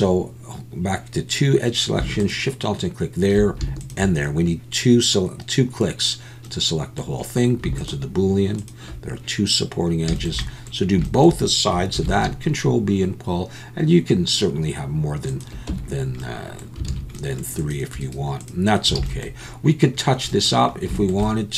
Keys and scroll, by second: 12.0 ctrl+b, 15.7 Tab, 16.9 alt+a, 19.0 alt+a.